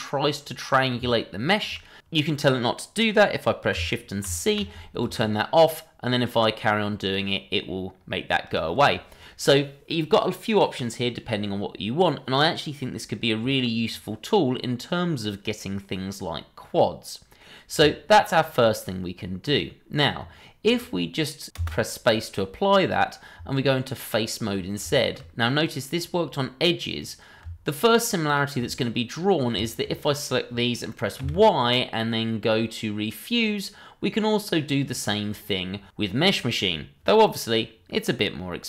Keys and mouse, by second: 1.1-1.6 shift+middle drag, 4.2 shift+c, 14.3-17.4 middle drag, 19.4 click, 21.5 space, 22.3-22.9 middle drag, 23.3 Tab, 24.9 shift+middle drag, 27.0 click, 28.2 ctrl+click, 28.8-29.1 middle drag, 29.6 shift+middle drag, 29.9-30.2 middle drag, 31.2 y.